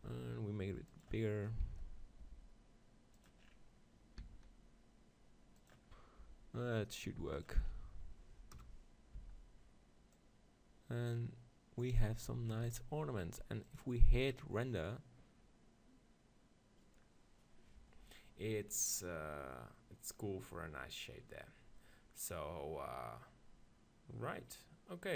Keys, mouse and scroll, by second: 0.0 g, 2.3 g, 3.0 middle click, 3.3-5.1 drag, 4.2 s, 5.1 middle click, 5.7-9.1 drag, 6.2 g, 8.6 KP_0, 9.2 z, 12.3 Tab, 12.7 Tab, 13.7-15.5 drag.